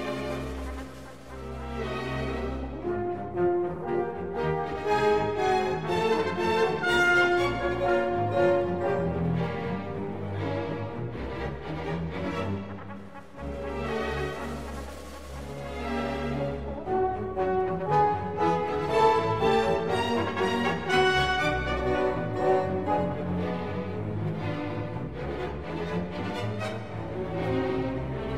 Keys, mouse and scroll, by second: 2.1 click, 2.7 middle click, 6.7 click, 8.1 click, 9.0-10.4 drag, 10.7 click, 13.2 ctrl+s, 15.0-17.6 typing, 15.6 Tab, 16.4 middle click, 16.5 middle click, 17.2 right click, 18.7 a, 18.8-20.0 right drag, 19.1 click, 19.2 a, 19.6 KP_1, 19.8 g, 20.8 Tab, 21.3 Tab, 21.6 Tab, 21.9 KP_0, 22.3 z, 22.7 ctrl+s, 26.9 z, 27.3 click, 27.9 z.